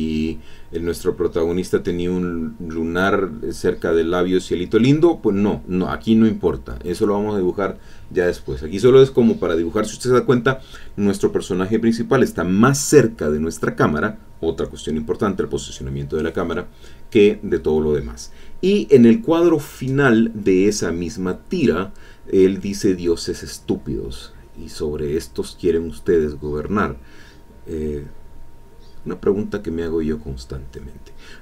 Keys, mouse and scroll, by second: 0.7-2.6 drag, 2.7 e, 2.8-6.5 drag, 3.4 e, 6.6-10.8 drag, 11.3-13.2 drag, 16.0 middle click, 17.7 alt+Tab, 19.2 click, 19.7-21.1 drag, 23.8 alt+Tab, 24.8 click, 25.2 middle click, 28.5 alt+Tab, 29.3 alt+Tab, 30.8 click, 31.3-31.4 drag.